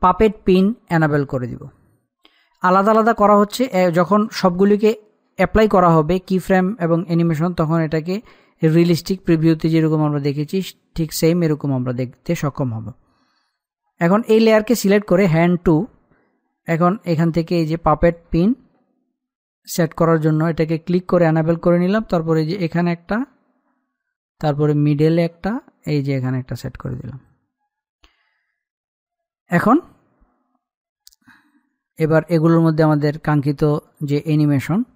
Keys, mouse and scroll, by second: 2.5-4.3 scroll down 1, 18.7 click, 20.2-20.9 scroll up 1, 22.7 scroll down 1, 23.1 click, 25.7 click, 31.2-31.6 scroll down 1, 33.7 click.